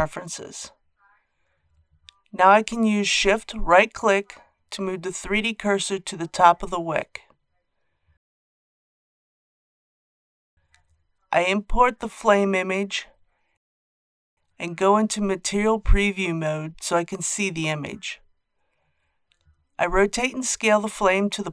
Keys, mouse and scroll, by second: 2.9 shift+right click, 4.8 KP_1, 6.0-6.7 scroll down 2, 11.1 click, 20.4 scroll down 1.